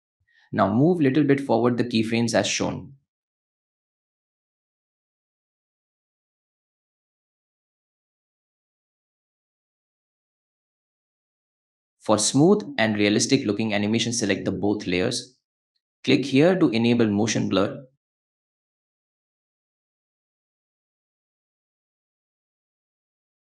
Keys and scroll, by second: 11.7 space, 13.0 space, 13.4 a, 18.9 F4, 23.0 space.